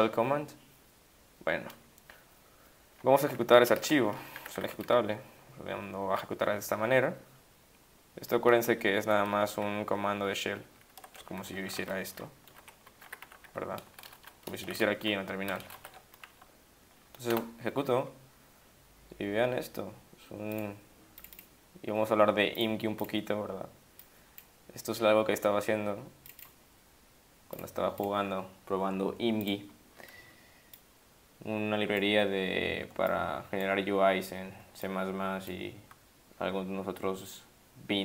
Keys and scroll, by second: 3.8-5.1 typing, 8.9 ctrl+shift+Left, 9.0 ctrl+shift+Left, 9.4 ctrl+shift+Right, 9.6 ctrl+shift+Left, 10.2 ctrl+shift+Left, 10.5 ctrl+shift+Right, 10.7 ctrl+shift+Right, 11.6 ctrl+alt+t, 12.1-15.5 typing, 15.7 ctrl+d, 17.3 Return.